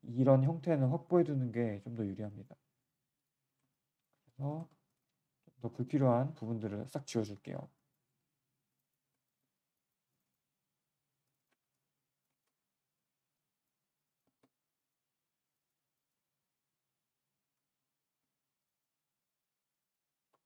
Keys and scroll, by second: 3.0 q, 14.8 g, 15.6 g, 17.5 z, 17.7 z, 18.8 g, 19.4 g.